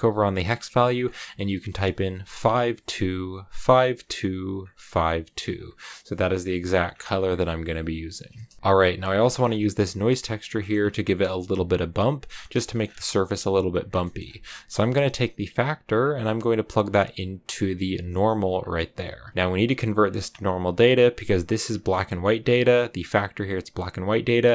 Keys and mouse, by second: 8.4 shift+click, 8.5 b, 8.5 g, 8.5 a, 9.2 a, 9.6 click, 10.9 click, 12.5 shift+middle click, 13.9 middle click, 15.9-18.4 drag, 19.9 click, 20.6 click, 21.5 click, 22.9-24.4 drag.